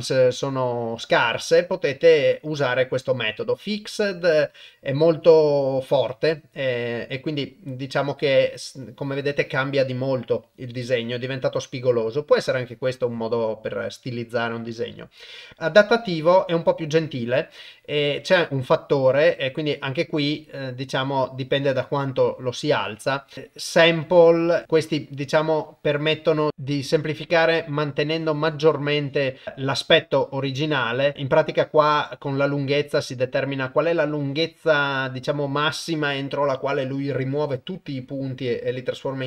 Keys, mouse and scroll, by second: 13.9-16.1 drag, 18.0-22.6 drag, 23.0 click, 23.9 shift+click, 25.4-27.2 drag, 28.1-32.0 drag, 34.0-35.4 shift+drag.